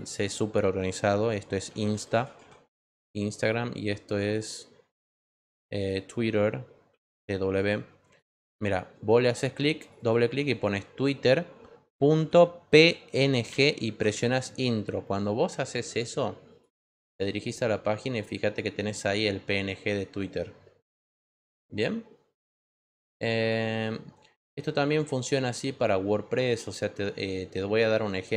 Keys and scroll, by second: 1.4-2.9 typing, 6.8 t, 7.4 w, 12.1-13.9 typing.